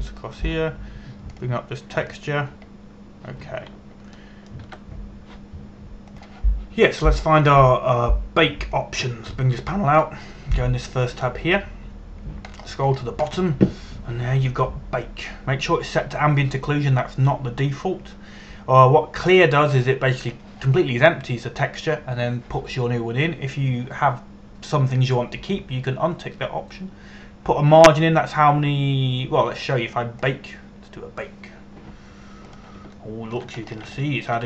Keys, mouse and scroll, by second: 4.4-5.3 scroll down 1, 5.8 shift+middle click, 7.8 click, 13.6-15.1 scroll down 1, 15.2 scroll down 1, 31.9 click.